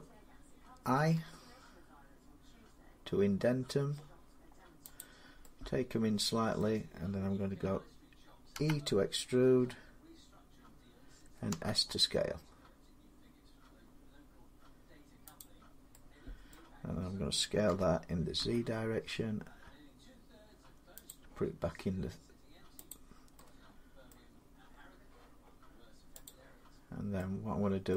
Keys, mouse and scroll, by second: 0.8 i, 4.8 click, 6.4 middle click, 8.4 e, 11.3 s, 15.2-16.3 drag, 16.3 middle click, 17.5-18.2 typing, 19.8-21.4 middle drag, 22.7 click, 23.9 middle click, 24.5-26.1 scroll up 3, 27.0 click, 27.8 middle click.